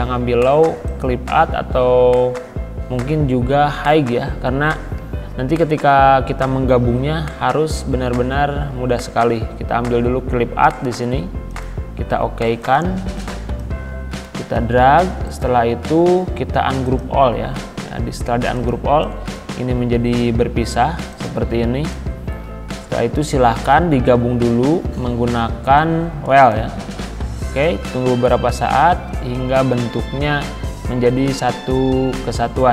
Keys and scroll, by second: 20.7 ctrl+z.